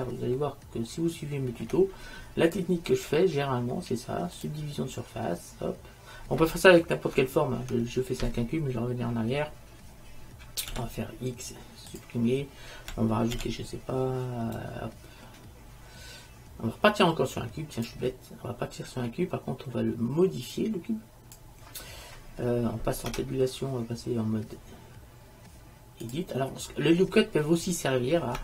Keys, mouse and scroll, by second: 0.7 click, 0.8 middle drag, 0.9 right click, 1.0 middle click, 1.2-2.4 middle drag, 2.6-4.6 drag, 10.8 x, 13.5 shift+a, 19.1-22.1 drag, 23.2 Tab, 26.2 Tab.